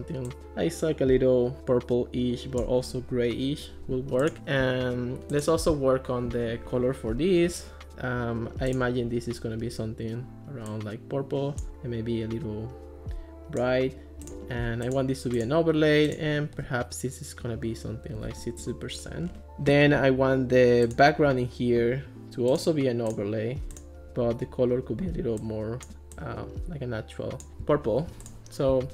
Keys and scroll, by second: 18.0-18.9 typing.